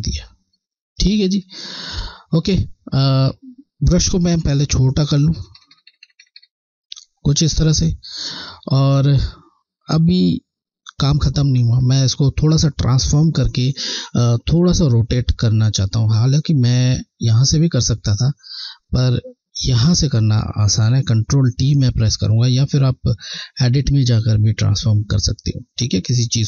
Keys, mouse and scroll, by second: 4.3-5.0 typing, 6.1 typing, 7.3 typing, 7.5 alt+scroll down 1, 8.6 scroll, 8.8-9.6 alt+scroll up 2, 9.8 scroll, 11.9 alt+scroll down 1, 16.6 click, 21.6 click, 23.2 Left, 25.7 Left.